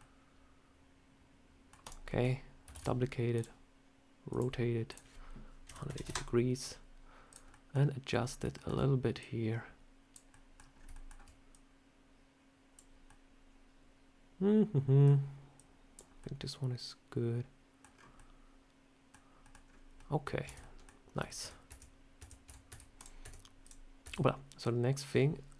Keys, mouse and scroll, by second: 1.7 click, 1.9 middle click, 2.6 shift+d, 3.2 click, 4.2 click, 5.6 click, 7.2 click, 7.4 middle click, 8.0 scroll down 2, 8.4 shift+middle click, 9.1 click, 10.2 middle click, 10.6 scroll up 3, 11.0 shift+scroll down 1, 11.4 click, 12.9 scroll up 1, 12.9 middle click, 15.4 click, 16.1 middle click, 17.8-18.1 scroll down 4, 18.0 middle click, 19.3 middle click, 19.5 scroll up 3, 19.8 middle click, 20.3 Tab, 20.5 middle click, 21.1 shift+middle click, 21.2 shift+middle click, 21.6 Tab, 22.1 Tab, 22.3 Tab, 22.6 Tab, 22.8 click, 23.1 Tab, 23.5 click, 23.9 Tab, 24.1 middle click.